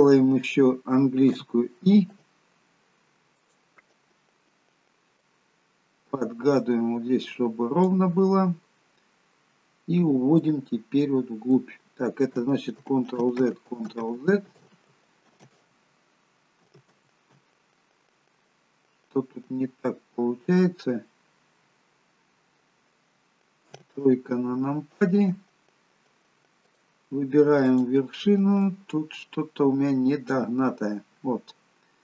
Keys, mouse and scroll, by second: 1.4 i, 5.3 click, 8.6 middle click, 10.5 click, 12.9 ctrl+z, 13.6 ctrl+z, 14.2 ctrl+z, 14.7 ctrl+z, 15.5 ctrl+z, 17.0 ctrl+z, 18.5 middle click, 23.8 KP_3, 26.7 click, 27.8 click, 31.6 click.